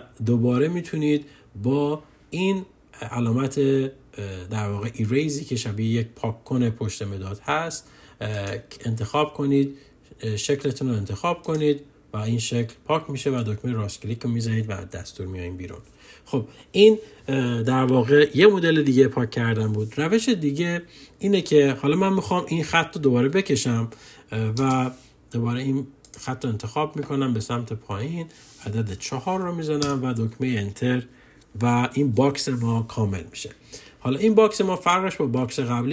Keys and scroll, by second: 28.4 4, 30.0 Return.